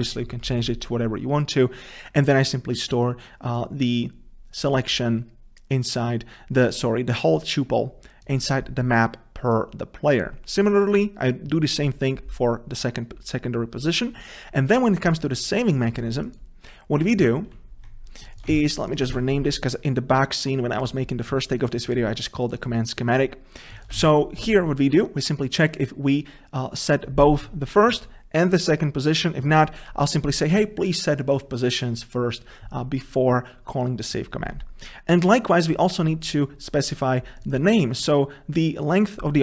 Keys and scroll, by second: 18.7 ctrl+v, 24.2 ctrl+v.